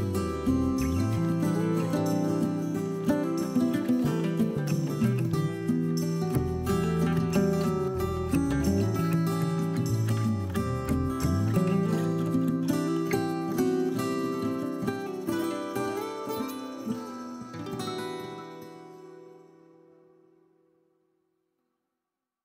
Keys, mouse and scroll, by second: 1.8 click, 1.9 scroll down 1, 2.0 middle click, 2.2 scroll up 1, 2.4 scroll down 1, 2.6 middle click, 3.7 ctrl+r, 4.7 scroll up 1, 4.8 middle click, 5.0 click, 5.6 click, 6.4 scroll down 1, 6.6 KP_3, 6.9-8.1 shift+middle drag, 7.1 scroll up 1, 7.5 g, 8.1 click, 8.3 scroll down 1, 8.6 scroll up 1, 8.8 click, 9.0 middle click, 9.3 click, 9.5 scroll up 1, 9.7 scroll down 1, 9.8 middle click, 10.0 click, 10.1 scroll up 1, 10.3 middle click, 10.7 KP_1, 11.3-11.6 scroll up 1, 11.7 click, 12.1 c, 12.3 right click, 12.6 g, 13.4 click, 13.7 c, 14.3 right click, 14.5 g, 15.1 drag, 15.2 scroll down 1, 15.3-16.1 middle drag, 16.1 scroll up 1, 16.5 KP_1, 17.3 c, 17.5 right click, 17.8 g, 18.6 scroll down 1, 18.6 middle click, 18.8 click, 18.9 middle click, 19.4 click, 19.6 middle click, 20.9-22.4 middle drag, 20.9 scroll up 1, 21.3-21.7 scroll down 1, 22.0-22.4 scroll up 1.